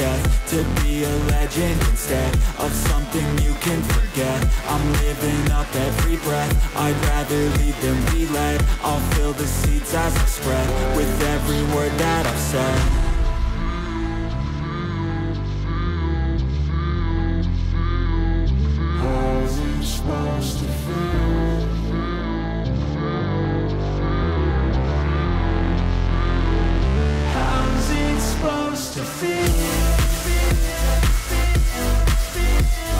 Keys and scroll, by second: 1.2 ctrl+z.